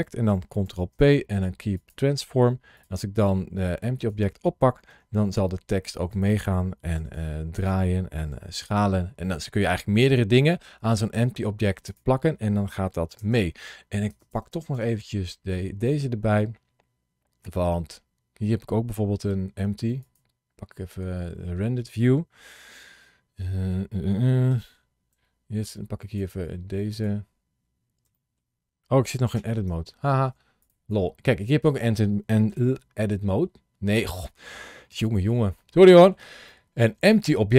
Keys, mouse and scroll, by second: 0.5 ctrl+p, 2.6 click, 3.8 click, 4.7 g, 6.0 click, 6.8 r, 7.0 r, 7.4 click, 8.1 s, 11.7 click.